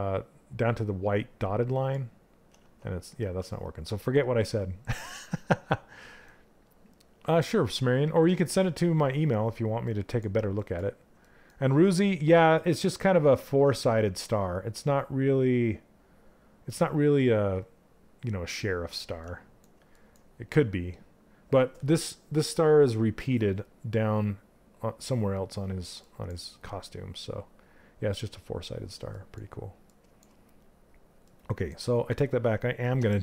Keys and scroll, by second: 32.5 w.